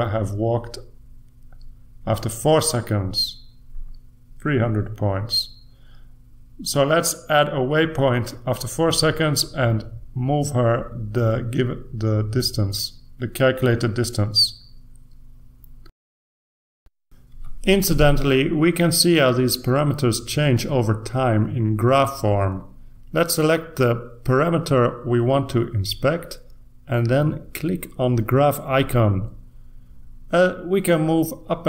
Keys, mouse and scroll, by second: 5.7 click, 9.1 click, 10.1-11.9 drag, 12.7-13.5 typing, 13.7 Return, 15.3 Return, 16.9-23.6 scroll up 1, 23.6-25.2 scroll up 1, 27.8 click, 28.7 click, 30.1 click, 31.3-31.6 drag.